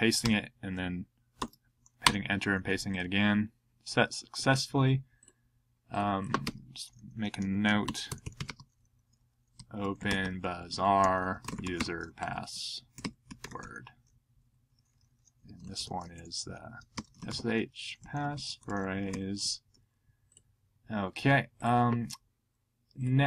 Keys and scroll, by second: 0.2 Return, 1.4 super+v, 2.0 Return, 7.8 typing, 9.3-11.1 typing, 14.3 Up, 15.5-16.2 typing, 17.6-19.4 typing.